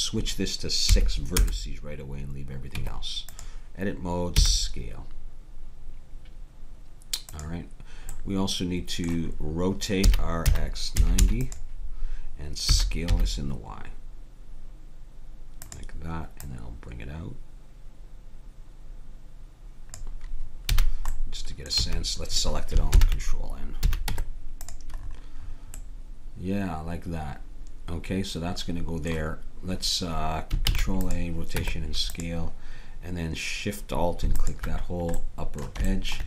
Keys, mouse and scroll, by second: 0.4-1.8 drag, 2.7 Tab, 4.4 s, 8.1-10.0 middle drag, 10.0 r, 12.7 s, 16.4-18.3 drag, 20.7 a, 21.1-22.9 middle drag, 21.8 a, 22.9 ctrl+n, 23.9 a, 24.1 Tab, 30.6 ctrl+a, 31.5 Tab, 34.4-36.1 drag, 35.1-36.2 middle drag.